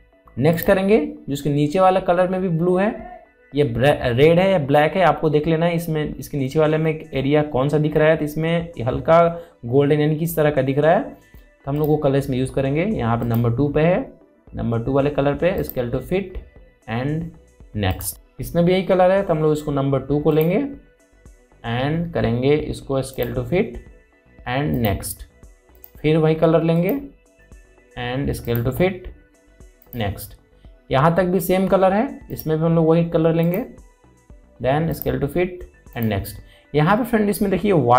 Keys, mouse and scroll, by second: 1.2 click, 12.4 click, 16.2 click, 21.0 click, 23.8 click, 23.8 click, 32.9 click.